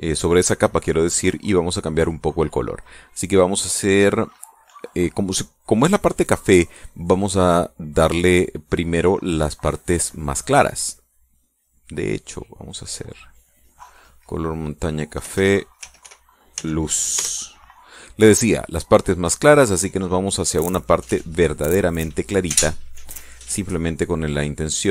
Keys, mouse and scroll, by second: 0.3 ctrl+click, 13.4 click, 15.2 click, 15.9-17.2 typing, 17.8 Return, 19.4-20.5 drag.